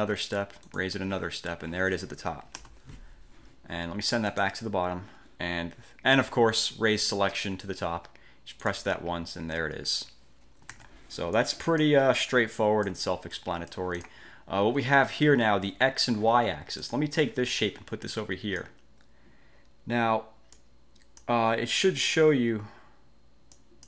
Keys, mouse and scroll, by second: 0.8 click, 2.7 ctrl+z, 4.4 click, 8.7 click, 10.8 ctrl+z, 11.5-12.1 drag, 12.3-13.1 drag, 13.4-14.4 drag, 16.9 click, 17.7 click, 20.7-21.5 drag, 23.7 click.